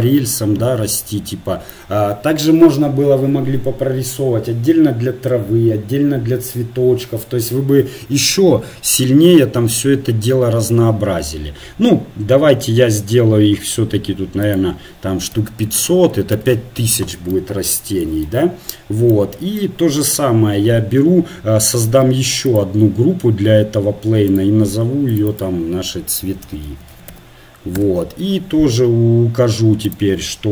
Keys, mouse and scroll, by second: 16.4 KP_0, 24.4-27.8 drag.